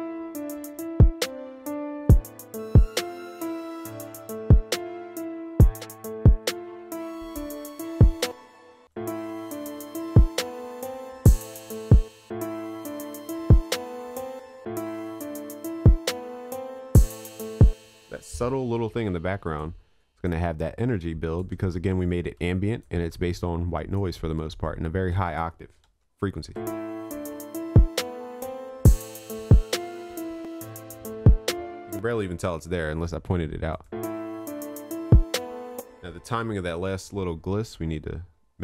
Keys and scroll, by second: 25.9 ctrl+s.